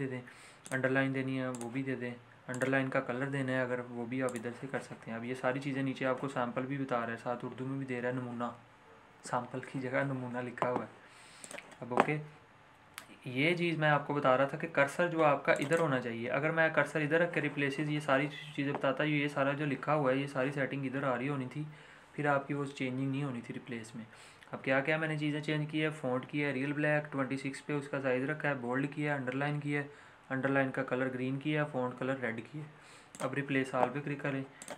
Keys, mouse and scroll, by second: 11.4 click, 15.5 click, 33.1 click.